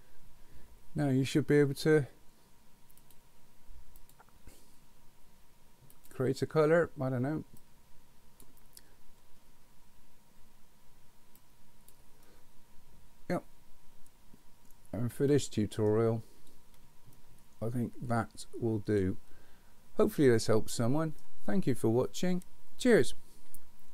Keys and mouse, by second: 3.0 click, 4.1-4.5 drag, 5.9 click, 11.4 click, 12.2-15.9 middle drag, 17.2-21.2 middle drag.